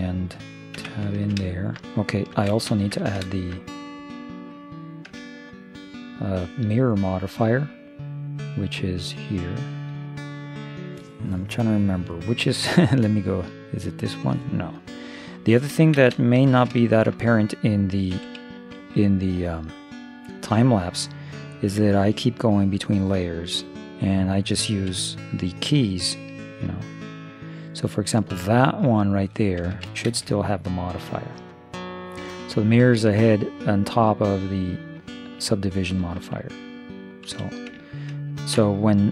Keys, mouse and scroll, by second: 0.8 Tab, 2.5 shift+space, 5.2 Tab, 7.3 click, 13.8-14.9 right drag, 16.0 shift+space, 18.2 1, 24.9 Escape, 26.5 0, 27.6-29.2 right drag, 28.4-29.4 drag, 29.4 KP_0, 30.1 shift+space, 37.3 1, 37.9-39.1 middle drag.